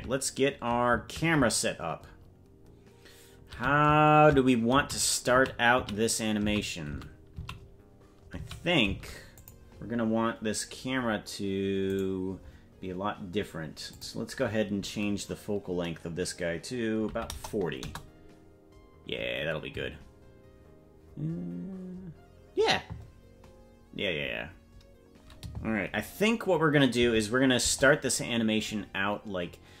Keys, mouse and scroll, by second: 13.9 right click, 13.9-27.0 drag, 27.0 KP_0, 27.6 KP_0, 28.6-29.2 scroll up 2, 29.2-29.8 scroll up 1.